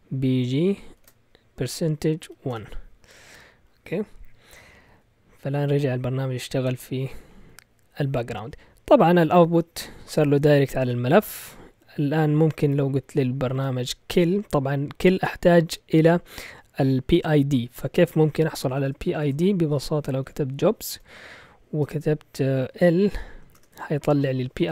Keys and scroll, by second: 0.7-2.2 typing, 2.5 Return, 12.4-13.5 typing, 18.4-22.7 typing, 23.5 Return.